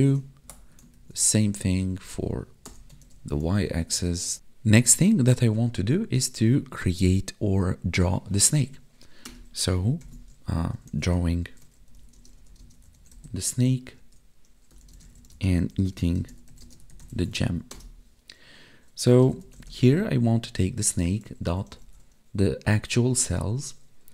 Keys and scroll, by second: 0.4 alt+shift+Down, 0.9 ctrl+s, 1.1 Left, 3.5 ctrl+s, 4.3 Down, 10.0 ctrl+/, 12.1 space, 12.5 space, 14.9 space, 15.3 space, 16.1 space, 16.6 space, 17.3 ctrl+s.